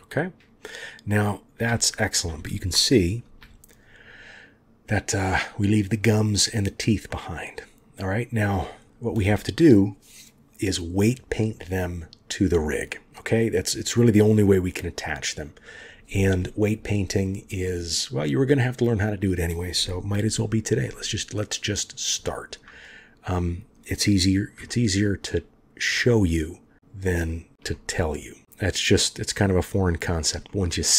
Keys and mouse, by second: 7.1-8.4 middle drag, 17.6-19.2 middle drag, 20.9-21.2 middle drag, 21.2 click, 21.2 right click, 24.7-25.3 shift+drag, 25.9-27.5 drag, 25.9-27.5 right drag, 27.7-28.9 drag, 27.7-28.9 right drag, 28.9 middle click, 29.7-30.2 shift+middle drag, 30.5-30.9 middle drag.